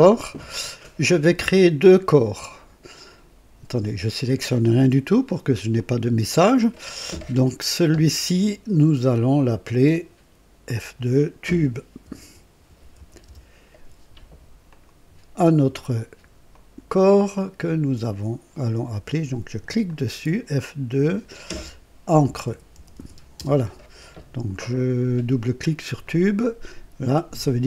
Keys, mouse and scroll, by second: 4.6 click, 5.7 click, 9.1 click, 10.6 F2, 11.7-13.4 typing, 14.6 click, 14.6 typing, 16.4 click, 19.8 click, 20.9 F2, 21.8-23.4 typing, 26.0 click.